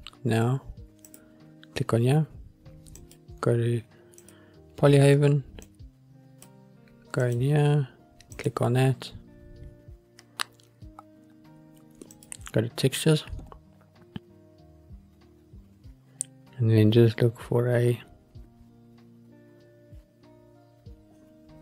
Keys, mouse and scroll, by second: 1.2 click, 4.4-6.7 drag, 7.4-8.7 drag, 12.3 click, 14.1-16.2 scroll down 1, 16.2-17.1 scroll down 42, 17.2-17.9 scroll down 1, 17.9-18.5 scroll down 3, 18.5-19.2 scroll down 3, 19.2-20.3 scroll down 2, 20.3-21.6 scroll down 3.